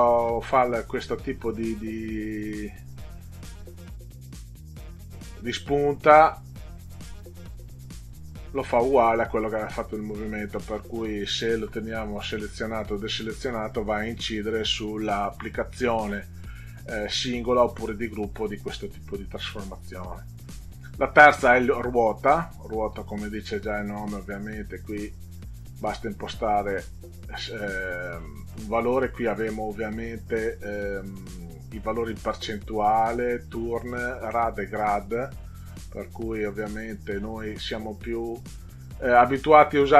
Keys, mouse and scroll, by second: 3.0 click, 8.1 click, 10.0 click, 13.4 click, 20.4 click, 22.4 click, 23.8-26.2 drag, 35.6 click, 36.7 click, 37.7 click.